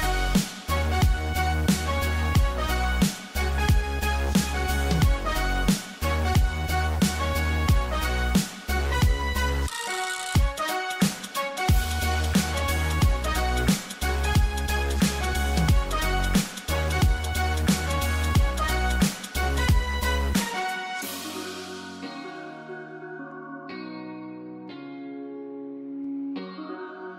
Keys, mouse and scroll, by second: 1.8 click, 3.1-3.5 scroll down 1, 3.5-5.3 scroll up 1, 5.5-5.9 scroll down 1, 5.9 scroll up 1, 6.7-7.6 scroll down 1, 7.6 space, 7.8 ctrl+click, 8.1 ctrl+e, 8.6 click, 10.2-11.1 scroll down 1, 11.1-11.8 scroll up 1, 12.5-13.5 scroll down 1, 13.5-15.2 scroll up 1, 15.2-16.5 scroll down 1, 16.5-16.9 scroll up 1, 18.1 scroll down 1, 19.0 scroll up 1, 19.2 space, 19.4 click, 19.7 space, 21.3 click, 26.3-27.0 scroll up 1.